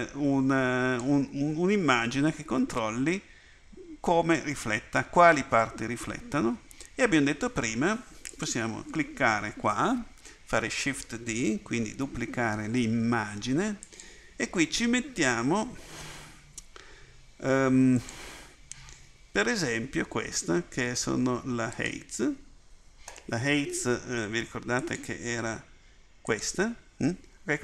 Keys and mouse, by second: 8.3-11.1 right drag, 11.1 shift+d, 26.5-27.6 drag.